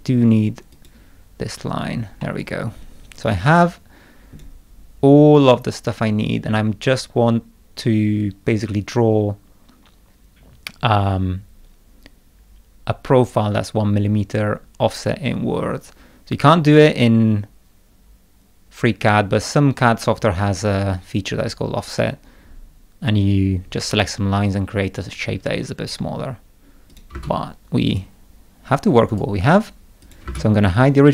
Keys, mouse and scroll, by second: 0.7 click, 2.2-4.3 middle drag, 2.4-4.4 drag, 26.0 scroll down 1, 26.9 click, 27.1 space, 27.8 click, 29.1 right click, 30.0 click, 30.2 space.